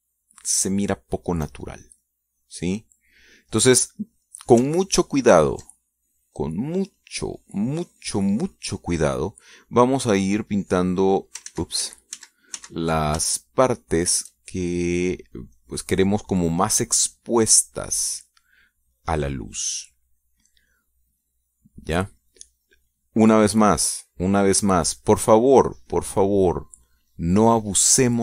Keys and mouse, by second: 1.0 middle click, 1.7-3.9 drag, 4.0 click, 4.8-5.9 drag, 6.9 ctrl+click, 7.5-8.9 ctrl+drag, 9.4 click, 10.4 click, 11.3 click, 11.7-12.8 drag, 13.0 ctrl+z, 14.8-15.9 ctrl+shift+drag, 16.2 shift+click, 16.6 click, 18.6 click, 19.1 click, 19.3 click, 20.6 click, 21.9-23.6 drag, 23.7 click, 24.1 click, 24.5 middle click, 25.2 click, 26.0 middle click, 26.9 click, 27.4 click.